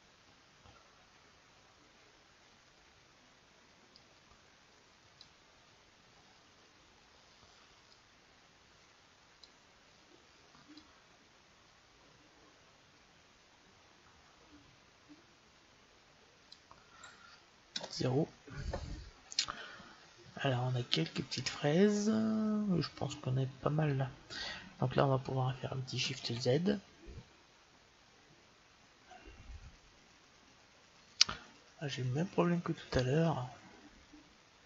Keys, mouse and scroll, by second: 8.2-9.7 drag, 11.0-12.7 drag, 17.6 KP_0, 27.2 shift+z.